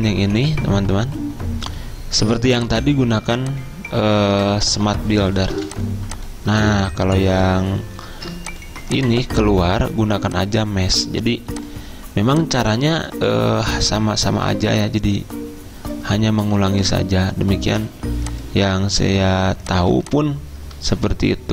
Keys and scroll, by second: 5.6 v, 8.1 ctrl+alt+2, 16.5 z, 17.8 a.